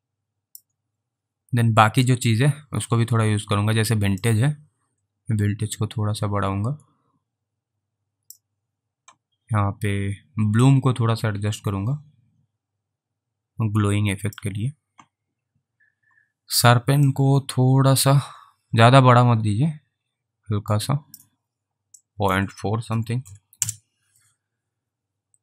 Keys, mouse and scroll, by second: 1.4 scroll down 3, 4.5 click, 11.0 click, 17.5 click, 22.3 click, 23.6 Return.